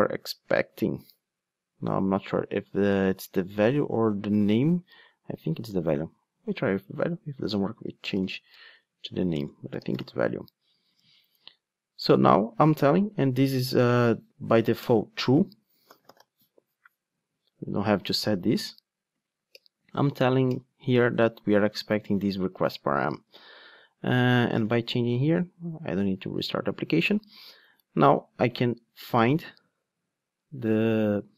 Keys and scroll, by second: 14.8 Return, 19.5 alt+Return.